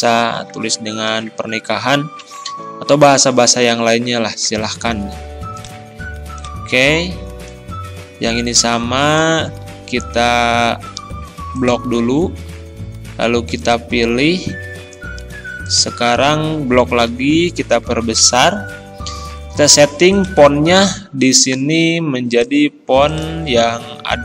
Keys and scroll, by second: 0.4 ctrl+a, 1.1 ctrl+e, 2.2 ctrl+], 9.5 ctrl+a, 16.1 ctrl+a, 17.1 ctrl+], 20.8 ctrl+a.